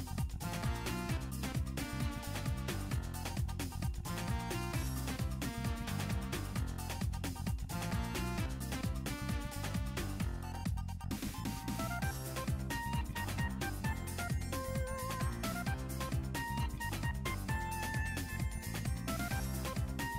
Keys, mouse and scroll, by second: 0.8 r, 2.4 click, 2.8 r, 5.2 drag, 5.4-5.7 scroll down 3, 5.7 scroll up 1, 6.1 alt+h, 6.7 click, 6.9 scroll up 1, 7.2 click, 7.7-8.2 scroll up 2, 8.0-8.5 drag, 8.6 click, 9.6 alt+g, 10.3 g, 12.2 click, 12.6 scroll down 2, 12.8 shift+middle click, 13.0 shift+middle drag, 13.3 scroll up 3, 13.5 shift+middle click, 13.6 shift+click, 13.7 middle click, 14.1 scroll down 2, 14.1 shift+middle click, 14.4 scroll up 2, 14.5 middle click, 14.7 scroll down 2, 14.8 middle click, 15.2 click, 15.7 click, 15.9-16.3 scroll up 2, 16.5 click, 17.2 alt+g, 18.2-18.7 scroll down 2, 18.6 scroll up 1, 19.0 click, 19.7-20.1 scroll down 1.